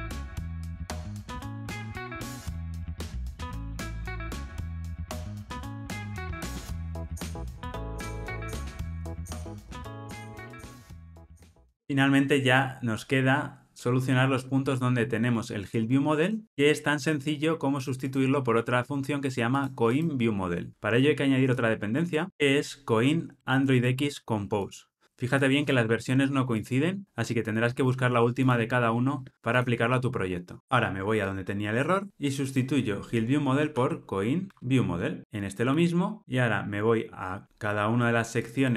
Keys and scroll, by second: 1.0 ctrl+alt+o, 2.7 ctrl+alt+o, 6.3 ctrl+alt+o, 10.2 super+F9, 22.3 super+v, 35.2 super+c, 36.2 ctrl+alt+o.